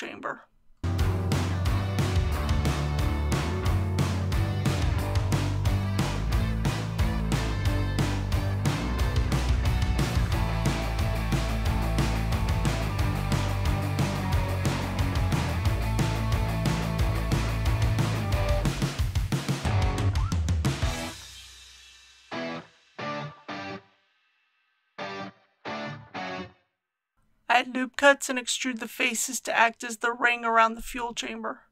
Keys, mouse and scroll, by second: 3.0 click, 4.0 shift+click, 4.6 click, 7.5 g, 8.8 shift+y, 10.0 click, 11.1 g, 11.3 shift+y, 13.5 click, 14.4 g, 14.6 shift+y, 15.7 click, 16.3 typing, 19.5 click, 27.6 ctrl+r, 28.4 click, 29.9 ctrl+r, 30.2 click.